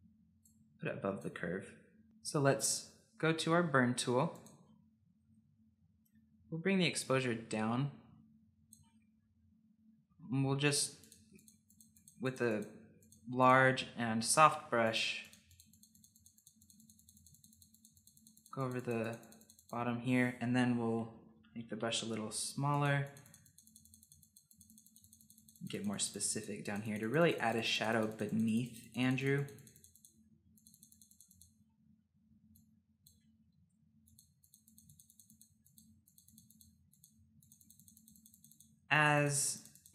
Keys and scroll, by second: 21.0-22.6 typing.